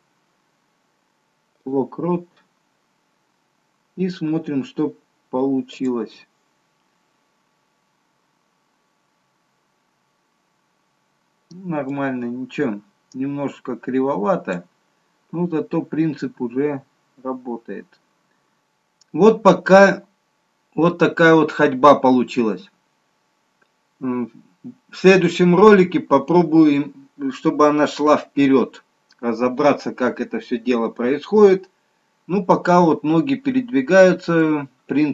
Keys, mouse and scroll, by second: 3.0-3.6 scroll down 1, 3.7-5.1 scroll down 1, 5.7 click, 12.6 click.